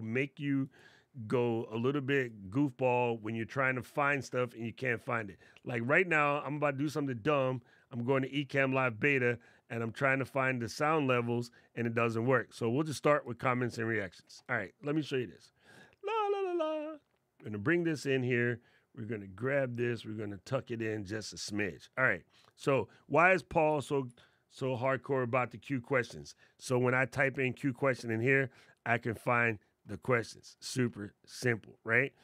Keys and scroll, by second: 23.8 shift+;.